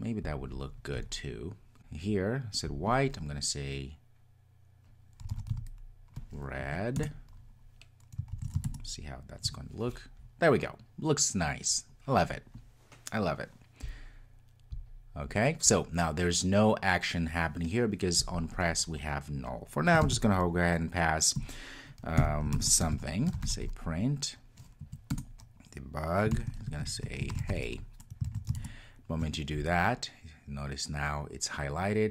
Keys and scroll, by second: 7.0 Return, 8.4 super+s, 25.2 Return, 28.3 super+s.